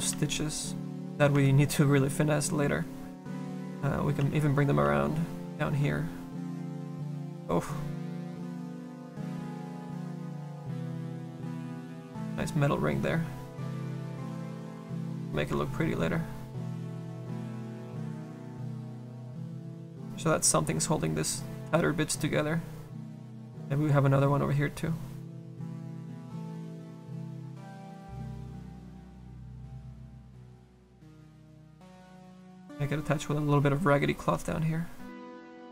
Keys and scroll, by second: 0.1 s, 4.3 s, 4.9 s, 5.8 s, 6.4 s, 8.2 s, 23.3 z.